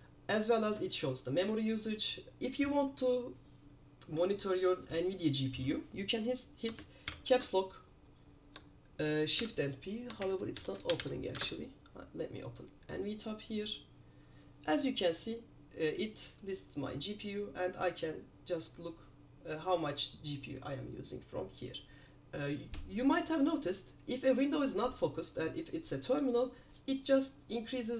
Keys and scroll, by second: 7.2 super+p, 9.5 super+p, 10.4-11.6 typing.